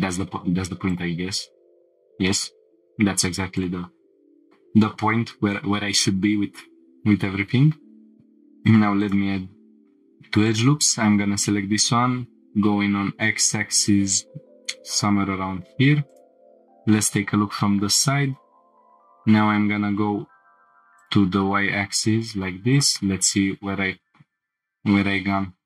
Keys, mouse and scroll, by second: 0.2-0.7 scroll up 1, 3.6 scroll up 5, 6.0 scroll up 1, 7.3 ctrl+r, 9.0 right click, 10.5 alt+click, 11.6 g, 12.2 x, 14.5 click, 16.1 click, 17.0 scroll up 2, 18.6 g, 19.1 y, 21.0-22.8 drag, 24.4 g, 24.4 x.